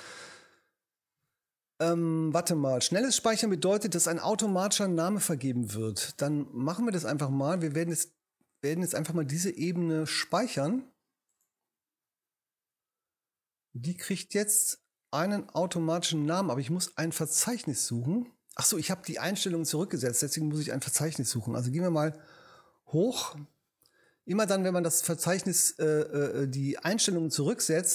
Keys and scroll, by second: 21.7 super+Up.